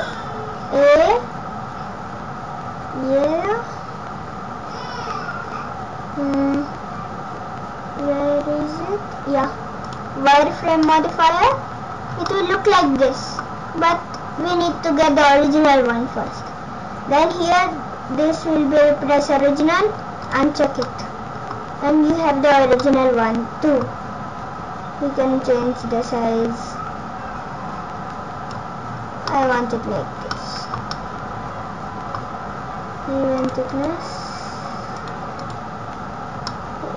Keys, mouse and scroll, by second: 10.5-10.9 scroll up 4, 10.9 middle click, 11.6-12.2 scroll down 6, 12.2 scroll up 1, 12.3 middle click, 20.3 click, 20.9 middle click, 21.8-22.9 scroll up 12, 22.8 middle click, 25.8 click, 28.9-30.0 scroll down 10, 29.3 middle click, 30.3 middle click, 33.4 click, 33.7 click, 35.0 click, 35.4 click, 35.9-36.5 scroll up 6, 36.5 middle click.